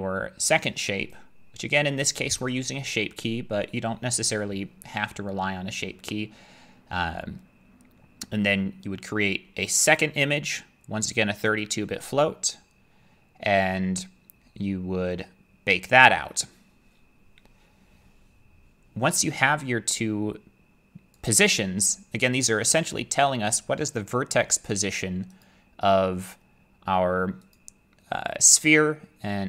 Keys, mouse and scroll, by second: 2.0 click, 9.8 click, 21.2 click, 25.4 click, 27.5 click.